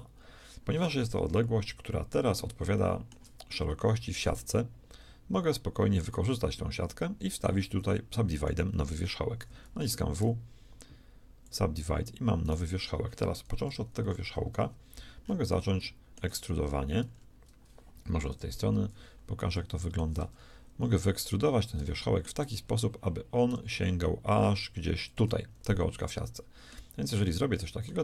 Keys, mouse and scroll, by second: 1.2 KP_1, 7.5 middle click, 7.7-9.5 drag, 9.8 w, 12.4-14.1 right drag, 13.6 KP_1, 13.9 KP_3, 15.3-17.4 middle drag, 18.3 ctrl+KP_3, 23.5 e, 26.1 middle click, 26.9 z.